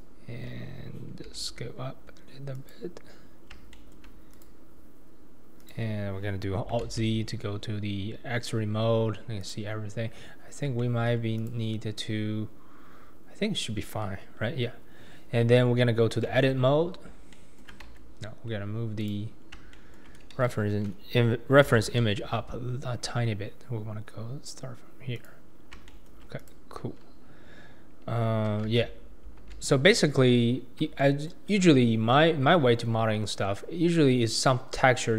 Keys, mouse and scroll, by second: 0.0 click, 1.2 s, 4.4 click, 5.6 click, 6.9 alt+z, 7.5-9.4 scroll up 2, 9.4 click, 10.3-10.8 scroll down 2, 10.8-11.4 shift+middle drag, 11.4 click, 14.7-16.3 scroll up 3, 16.3 Tab, 16.8-17.3 scroll down 2, 17.3 shift+middle click, 17.9 Tab, 19.0 click, 19.4-19.7 scroll down 2, 19.7-21.6 shift+middle drag, 21.6 g, 26.5 click, 27.0-28.5 scroll down 2, 28.6 alt+z, 29.4 alt+z, 30.5-31.0 scroll down 4, 31.0-31.5 shift+middle drag, 31.5-32.1 scroll down 2, 32.1-32.7 shift+middle drag, 32.7-33.8 scroll down 2, 33.8-35.0 scroll up 2, 35.0-35.1 scroll up 2.